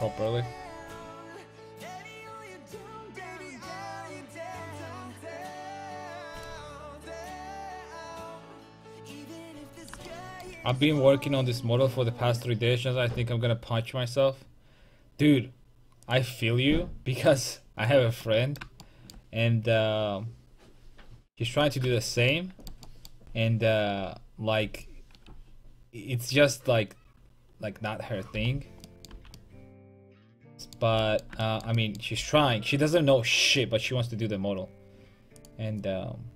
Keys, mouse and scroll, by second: 9.6 middle click, 10.7-18.2 middle drag, 28.9 middle click, 29.1 a, 29.8 middle click, 30.2 middle click, 32.2 k.